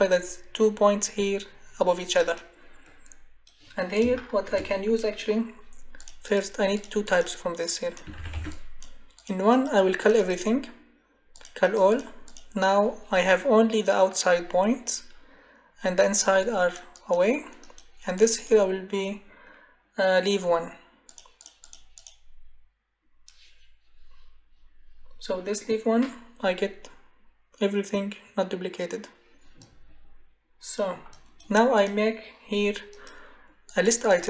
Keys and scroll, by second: 8.1 ctrl+c, 8.3 ctrl+v.